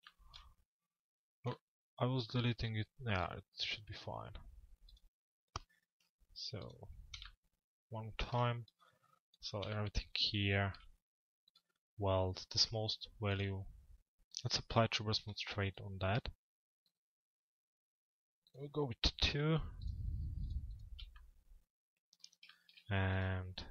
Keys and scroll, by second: 23.5 z.